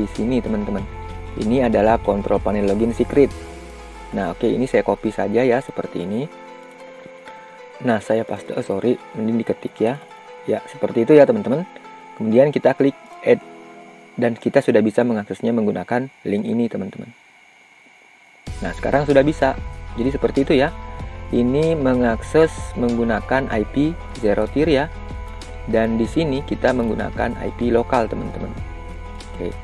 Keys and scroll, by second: 5.3 ctrl+c, 8.1 ctrl+v.